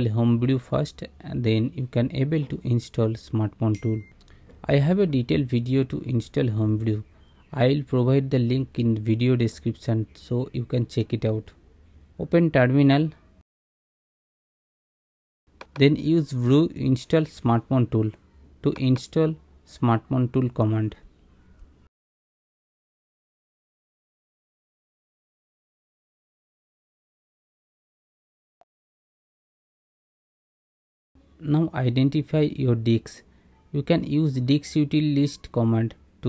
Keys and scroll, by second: 11.1-12.6 typing, 13.8 super+=, 14.8 super+=, 22.4 Return, 30.9-32.5 typing, 35.5 Return.